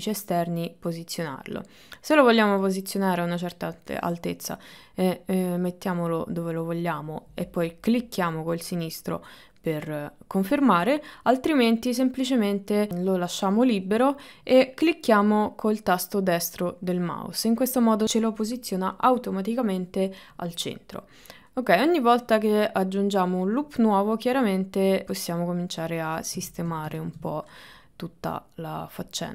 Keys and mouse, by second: 22.3 click, 23.4-24.4 drag, 25.1 click, 27.0-29.3 shift+middle drag.